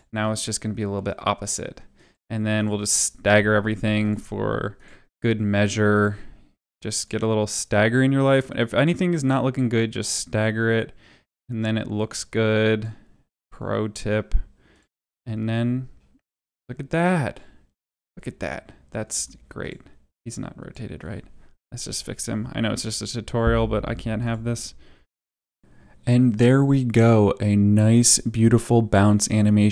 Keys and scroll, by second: 0.0 space, 3.2 u, 14.9 space, 19.0 space, 22.7 r, 24.8 Down, 25.6 Up, 25.8 Up, 27.1 space.